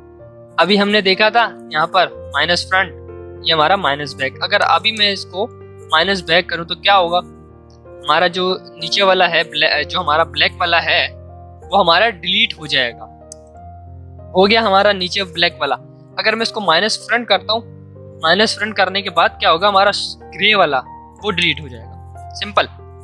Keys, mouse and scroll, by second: 4.5-7.7 drag, 13.2 click, 21.3 click, 22.6 ctrl+z.